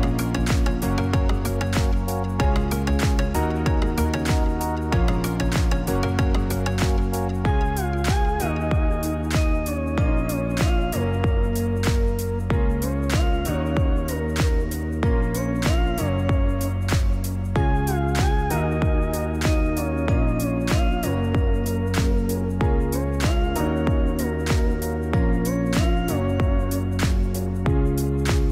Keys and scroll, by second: 11.3 0, 19.8 0.